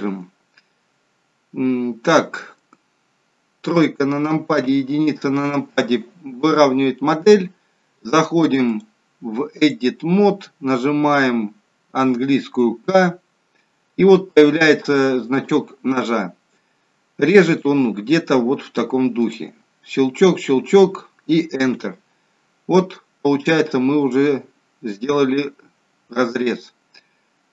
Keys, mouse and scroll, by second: 3.7 KP_3, 4.6 KP_1, 8.6 click, 12.8 k, 22.8 middle click.